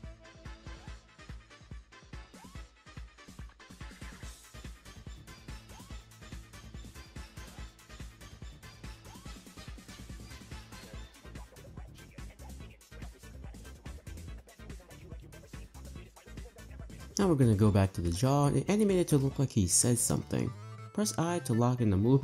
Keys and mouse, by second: 0.0-0.9 typing, 0.8 click, 1.7 click, 2.1-4.7 typing, 2.6 click, 3.7 click, 4.2 click, 5.5 middle click, 5.8 click, 5.9 space, 6.5 space, 7.0 click, 7.2 space, 8.2-11.3 typing, 8.8 click, 10.8 click, 11.6 click, 12.5 r, 13.3 click, 13.5 shift+d, 14.1 click, 14.2 space, 14.7 space, 15.2-15.5 drag, 15.9 click, 16.1 b, 16.8 Delete, 18.0 click.